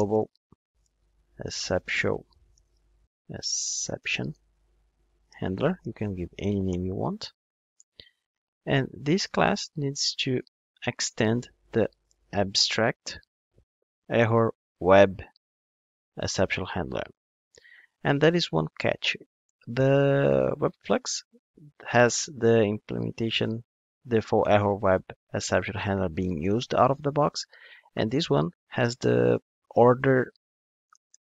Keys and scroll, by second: 10.8 Return.